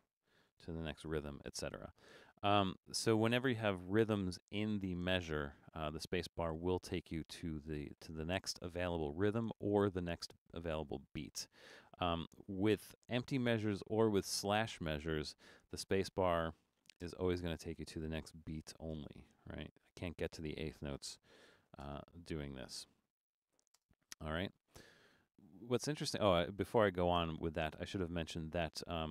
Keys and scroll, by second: 0.0-1.7 typing, 16.7 shift+d, 17.0 space, 18.6 shift+g, 18.9 space, 21.6 a, 21.8 space, 23.5 shift+g, 23.8 space.